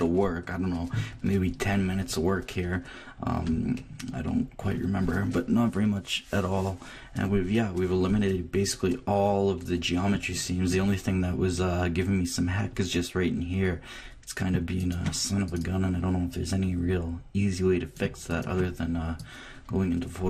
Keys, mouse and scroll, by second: 2.1-6.6 middle drag, 3.4 Left, 7.2-13.6 middle drag, 14.7-17.5 drag, 18.3-20.2 drag.